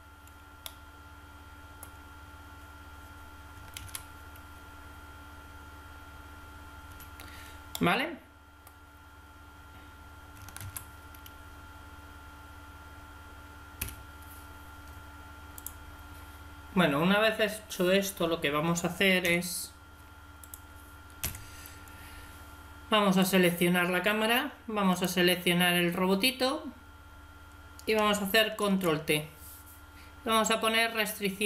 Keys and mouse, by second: 3.6 alt+a, 6.8 Escape, 7.6-10.2 middle drag, 10.5 alt+a, 13.8 Escape, 21.2 KP_1, 26.6-28.5 middle drag, 28.5 ctrl+t.